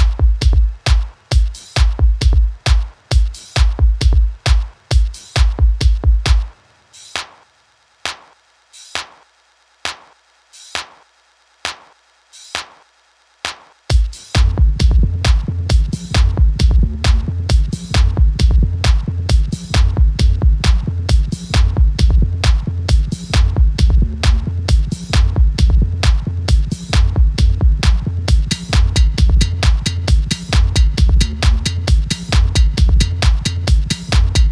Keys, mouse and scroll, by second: 0.0-0.7 typing, 2.3 Return, 5.8 click, 10.1 Delete, 12.2-23.9 drag, 22.2 drag, 27.3-33.2 drag.